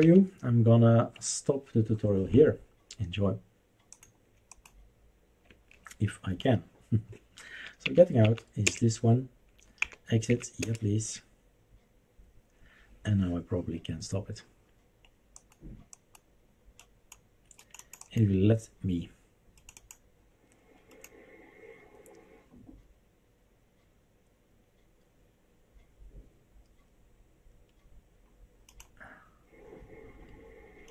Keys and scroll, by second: 0.0 Up, 5.5 Escape, 7.8 Up, 8.2 Up, 8.6 Return, 9.9 Down, 10.3 Up, 10.6 Return.